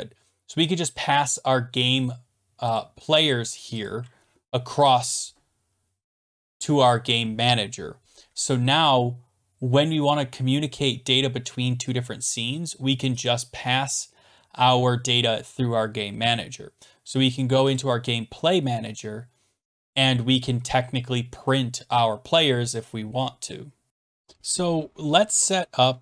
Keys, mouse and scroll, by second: 2.8 click, 3.8 click, 13.3 click, 17.8 click, 18.7 scroll down 4, 23.9 click.